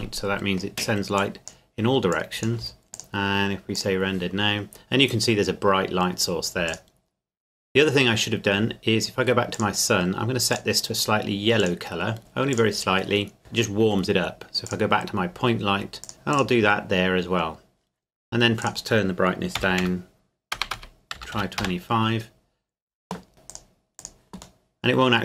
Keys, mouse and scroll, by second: 0.2 middle click, 1.2 click, 2.9 KP_0, 2.9 click, 6.7 click, 8.7-9.5 scroll down 1, 9.5 click, 14.7 click, 19.6-21.3 typing, 21.6 KP_Enter, 23.3 middle click, 23.5 click, 24.6 middle click.